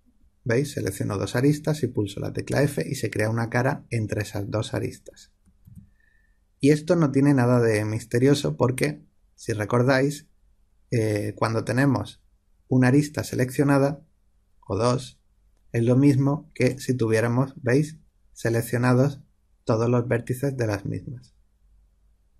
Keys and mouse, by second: 2.4 f, 5.6 ctrl+z, 16.5 click.